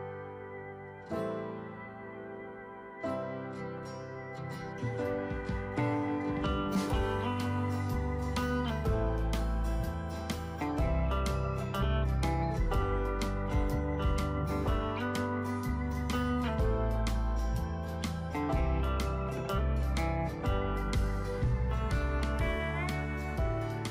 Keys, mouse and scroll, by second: 0.0 click, 2.8 alt+click, 6.3-8.7 drag, 9.7 alt+click, 23.7-23.9 scroll down 1.